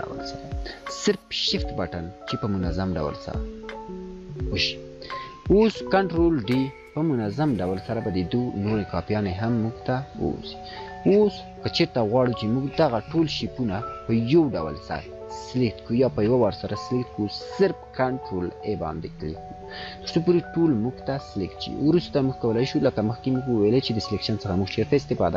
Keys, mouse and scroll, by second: 4.4 scroll down 1, 8.3 scroll up 1, 11.9 scroll up 1, 12.1 click, 12.5 scroll down 1, 13.9 scroll up 1, 21.5 ctrl+a, 22.0-22.6 alt+shift+click, 23.7 scroll down 1, 24.2 scroll up 1.